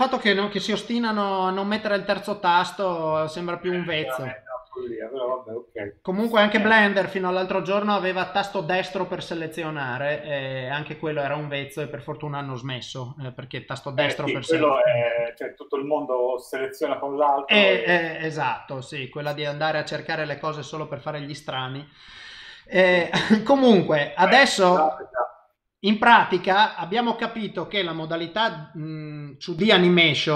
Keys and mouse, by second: 3.9 ctrl+middle click, 5.0 shift+middle click, 5.9 ctrl+middle click, 29.6 click.